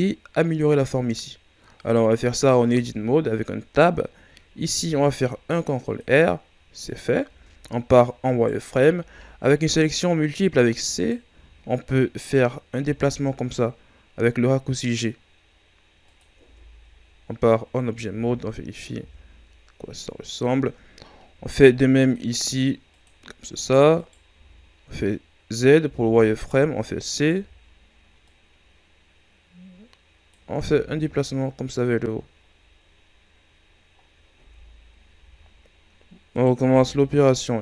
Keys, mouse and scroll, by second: 1.7-2.6 right drag, 2.6 Tab, 3.8 scroll up 1, 4.7 ctrl+r, 6.4 scroll up 1, 7.2 z, 8.2 right click, 8.9 c, 11.2 z, 12.7 g, 16.3 Tab, 17.0 scroll down 3, 17.8 scroll up 1, 18.0 Tab, 18.9 g, 21.3 ctrl+r, 22.8 click, 23.4 scroll up 2, 23.9 right click, 24.2 z, 25.8 c, 27.3 z, 28.1-30.6 drag, 30.6 Tab, 30.9-31.6 scroll down 4, 31.7-32.5 scroll down 2, 32.5-32.8 scroll up 3, 33.4 scroll down 4, 33.9 scroll up 5, 34.3 Tab, 35.1 z, 36.2 right click, 36.6 c.